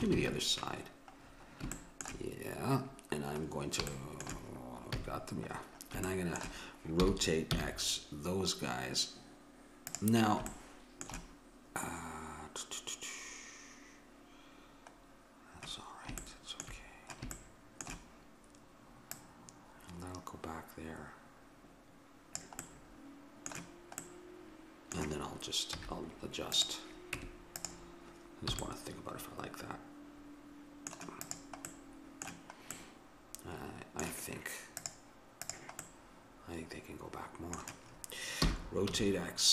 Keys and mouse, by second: 1.3-4.3 middle drag, 4.9 a, 7.0 r, 15.4-19.1 middle drag, 19.1-20.9 drag, 22.6-25.8 middle drag, 25.8 z, 27.2 Tab, 28.6 a, 28.7-30.2 middle drag, 31.3-33.0 drag, 33.0 middle click, 34.8-36.6 drag, 38.5 r.